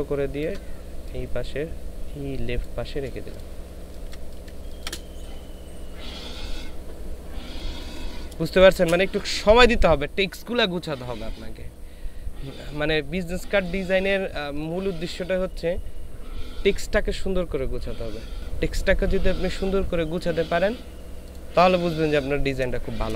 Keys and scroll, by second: 3.8 ctrl+space, 7.5 ctrl+space, 8.3 ctrl+space.